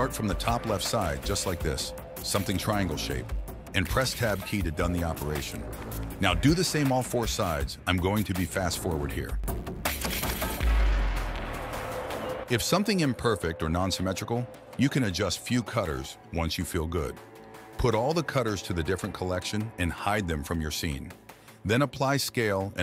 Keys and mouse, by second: 13.8 click, 15.2 g, 18.9 shift+right click, 19.0 shift+middle click, 19.5 shift+middle click, 19.9 m, 21.2 click, 21.8 ctrl+a.